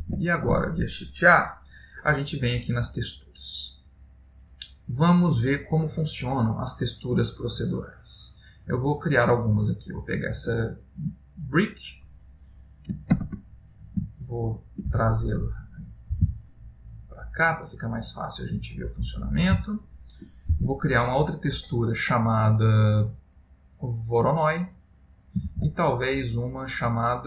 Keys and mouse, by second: 0.1 shift+a.